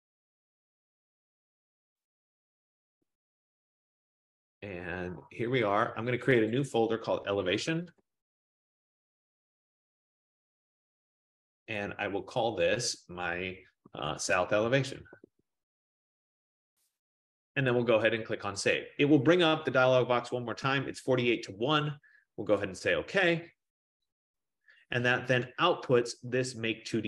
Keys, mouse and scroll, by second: 0.1 click, 2.2 click, 2.4 click, 6.6 click, 7.9-9.5 typing, 11.2 click, 11.3 click, 11.4-12.1 typing, 12.7 click, 13.7-17.0 typing, 19.0 click, 23.1 click.